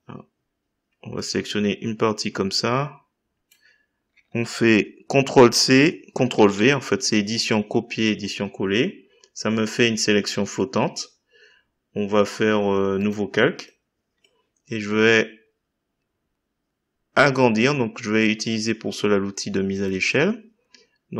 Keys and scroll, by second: 5.4 ctrl+c, 6.3 ctrl+v.